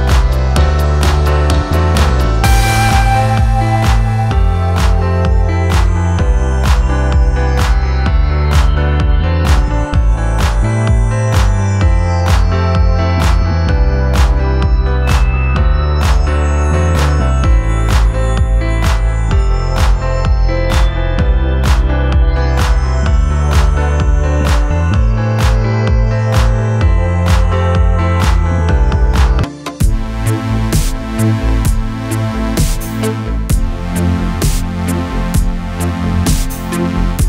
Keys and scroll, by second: 3.5 BackSpace, 6.5 ctrl+y, 9.2 alt+space, 11.0 shift+Right, 11.7 shift+Left, 12.2 shift+Left, 13.1 shift+Left, 16.4 shift+Right, 17.8 Left, 18.0 Left, 18.8 Right, 19.1 Right, 22.1 Right, 22.3 Right, 24.3 space, 25.5 space, 26.4 space, 27.9 space, 32.1 ctrl+g.